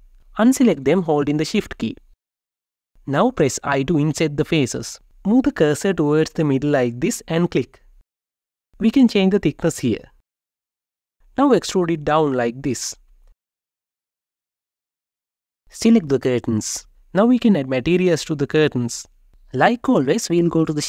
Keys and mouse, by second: 1.1 shift+click, 1.8 shift+click, 2.6 shift+click, 5.0 i, 7.6 Return, 8.8-10.9 drag, 11.8 e, 14.6 ctrl+shift+click, 15.6 Tab, 16.8 click.